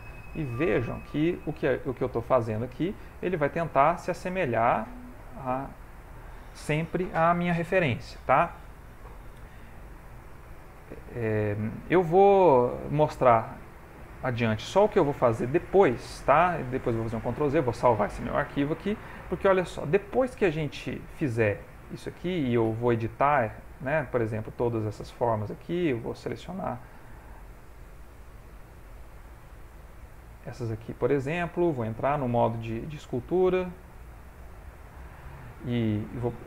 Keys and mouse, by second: 0.0 click, 0.9 click, 2.1 ctrl+middle click, 2.7 shift+middle click, 3.6 ctrl+middle click, 4.3 shift+middle click, 5.7 ctrl+middle click, 10.1 middle click, 13.7 shift+middle click, 16.8 shift+middle click, 17.5 ctrl+s, 18.2 ctrl+middle click, 18.6 shift+middle click, 19.2 middle click, 23.1 shift+middle click, 23.7 ctrl+middle click, 24.7 alt+click, 26.5 middle click, 27.5 alt+click, 29.5 alt+click, 30.6 shift+middle click, 31.1 ctrl+middle click, 31.5 shift+middle click, 32.1 ctrl+Tab, 33.0 ctrl+Tab, 34.4 ctrl+Tab.